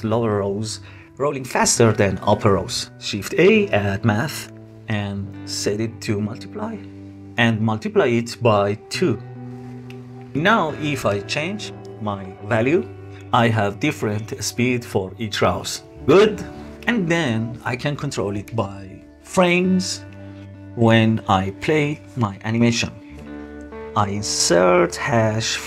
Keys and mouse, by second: 2.1 shift+a, 5.5-6.5 drag, 8.2-9.3 drag, 10.5-16.8 shift+drag, 17.6-21.1 drag.